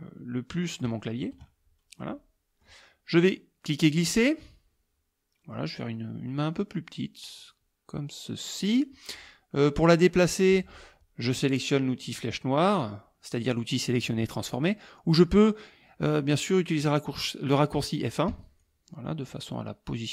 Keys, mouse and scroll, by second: 0.9 KP_Add, 2.0 middle click, 2.1 click, 3.7-8.9 drag, 18.3 F1, 18.6 click.